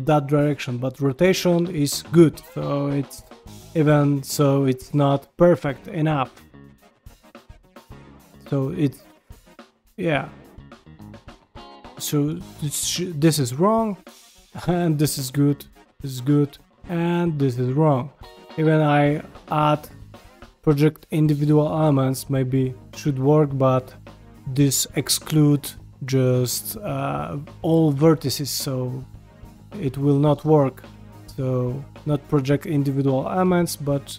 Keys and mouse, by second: 0.7 shift+middle click, 1.1 g, 4.0 middle click, 4.9 middle click, 5.7 g, 6.4 middle click, 7.1 g, 7.9 middle click, 9.1 middle click, 10.1 g, 10.8 middle click, 11.9 middle click, 12.7-13.8 middle drag, 13.9 g, 14.5 middle click, 15.3 g, 16.0 middle click, 16.4 g, 17.3 middle click, 18.7-21.3 drag, 21.6 g, 23.2-24.9 middle drag, 25.2 middle click, 25.7 g, 29.5 ctrl+z, 29.9 ctrl+z, 31.0-32.8 drag, 33.4 g.